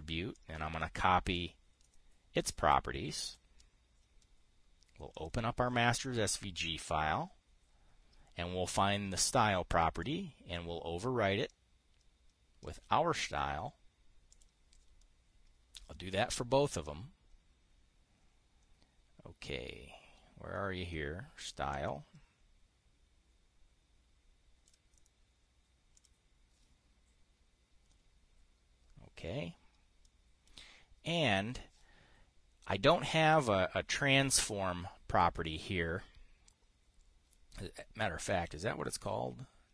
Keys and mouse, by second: 0.8-1.9 drag, 3.8 click, 5.6 click, 10.5-13.3 drag, 13.7 click, 14.8 click, 22.2-25.3 drag, 30.5 click, 38.7 click.